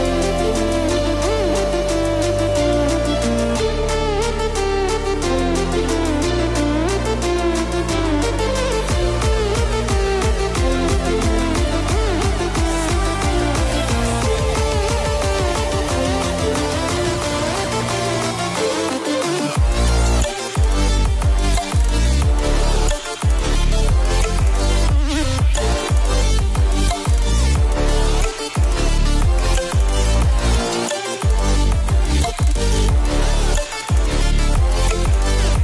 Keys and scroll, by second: 1.3 shift+Return, 1.9 shift+Left, 3.4 ctrl+0, 25.7 ctrl+space, 27.8 ctrl+0.